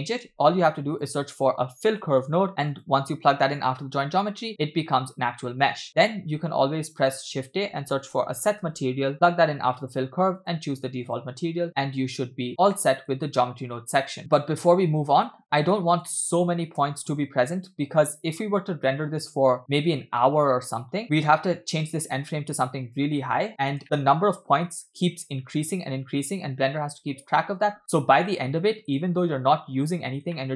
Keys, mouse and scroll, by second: 0.3 shift+a, 2.2 l, 2.5 l, 5.9 click, 6.1 shift+a, 10.5 click, 11.9-12.8 scroll down 4, 12.5 scroll up 3, 12.8-13.9 middle drag, 14.1 shift+middle click, 15.7-16.1 scroll down 2, 16.1-16.4 shift+middle drag, 16.8 space, 20.8 space, 21.8-23.0 drag, 23.5-23.8 scroll down 2, 23.8 shift+middle click, 27.8 space, 29.8 space, 30.3-30.5 shift+middle drag.